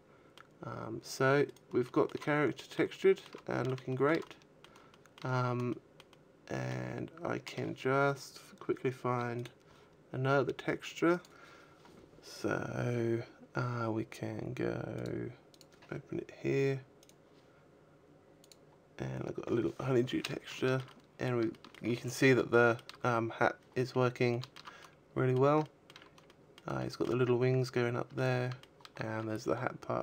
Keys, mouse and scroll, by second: 0.4-1.1 scroll down 4, 1.1 scroll down 3, 1.3 right click, 1.6 shift+middle click, 2.0 middle click, 3.3 shift+middle click, 4.0 shift+middle click, 4.7 shift+middle click, 5.0-5.5 scroll up 3, 5.5 shift+middle click, 5.9 shift+middle click, 14.5 click, 18.4 click, 20.1 shift+middle click, 20.4 middle click, 21.1 shift+middle click, 21.6-22.0 scroll up 3, 22.1 shift+middle click, 22.7-23.5 scroll up 2, 23.5 scroll down 2, 23.9 shift+middle click, 24.3 middle click, 25.2 shift+middle click, 25.8 middle click, 26.3 shift+middle click, 27.1 shift+middle click, 27.7 shift+middle click.